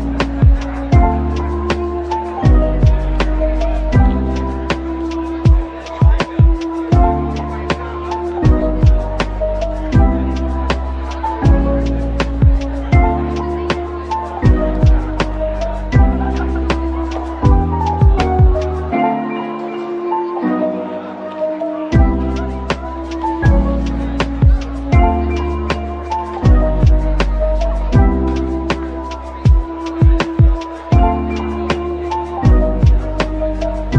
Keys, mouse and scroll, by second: 0.1 typing, 1.8 Tab, 2.4-3.1 scroll down 1, 3.1 typing, 3.8 middle click, 5.3 Tab, 7.0 ctrl+l, 12.2 ctrl+z, 15.8 Tab, 16.5 Tab, 17.3 typing, 20.0-20.6 typing, 22.1-23.4 typing, 24.8-26.0 typing, 28.8 Tab, 29.1 scroll down 1, 29.8 typing, 30.1-30.5 scroll down 1, 30.8 middle click, 33.6 Tab.